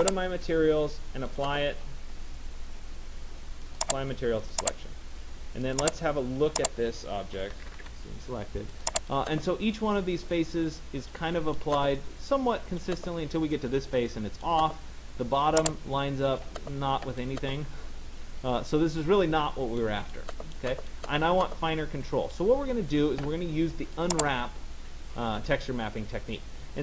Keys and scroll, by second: 7.2 Return.